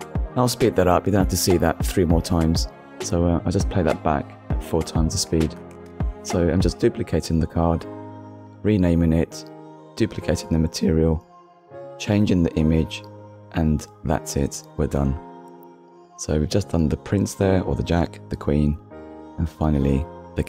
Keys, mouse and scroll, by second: 0.7 scroll down 2, 1.0 shift+middle click, 2.4 click, 3.2 x, 3.6 click, 3.8 click, 4.0 KP_0, 4.0 Return, 4.3 click, 4.6 click, 5.6 click, 5.9 click, 6.2 a, 6.3 c, 6.6 k, 7.1 click, 7.5 click, 7.8 c, 7.9 Return, 8.2 scroll up 1, 8.4 click, 8.7 click, 9.0 click, 9.5 click, 9.6 middle click, 10.6 KP_1, 10.8 scroll up 1, 11.1 click, 11.3 ctrl+middle click, 11.5 shift+middle click, 11.7 click, 12.4 x, 12.8 click, 13.3 click, 13.7 click, 14.0 u, 14.2 Return, 14.7 click, 15.2 click, 15.5 u, 15.7 Return, 16.0 middle click, 16.2 click, 16.8 click, 17.2 click, 17.9 click, 18.2-18.7 scroll down 3, 18.8 shift+middle click, 18.9 click, 19.4 shift+d, 19.5 x, 20.2 click.